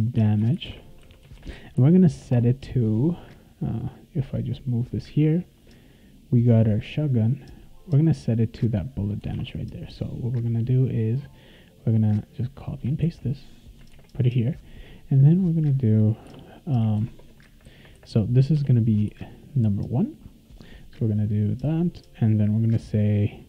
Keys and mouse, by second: 0.0-1.5 typing, 3.8-5.1 drag, 6.7 click, 7.5 click, 9.3 alt+Tab, 11.8-12.8 drag, 13.0 ctrl+c, 13.6 click, 13.9 ctrl+v, 16.3 -, 17.0 shift+., 18.5 BackSpace, 19.1 1, 21.1 click.